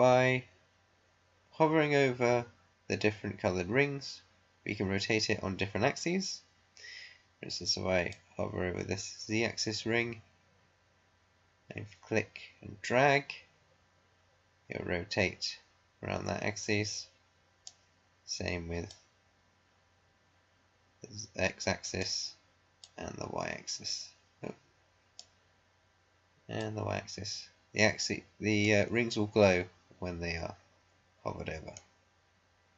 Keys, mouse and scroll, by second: 8.0-18.0 drag, 18.8-31.0 drag.